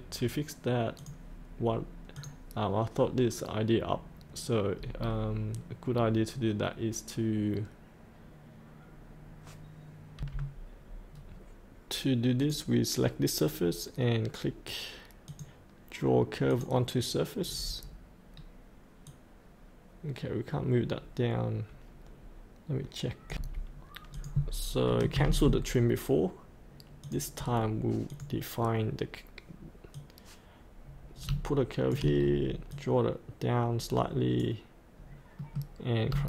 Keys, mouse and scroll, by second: 1.0 click, 2.4 click, 5.0-5.9 scroll down 1, 5.9-10.2 scroll up 1, 10.2 F8, 11.1-12.4 scroll down 1, 12.4 click, 13.2 click, 17.8-18.3 scroll up 1, 18.3-19.1 scroll down 1, 19.1 click, 19.3-20.3 drag, 20.4-23.3 drag, 23.3 F8, 24.1 click, 27.0 click, 30.1-31.9 drag, 32.2-32.7 scroll down 1, 32.7-35.1 drag, 35.4 middle click.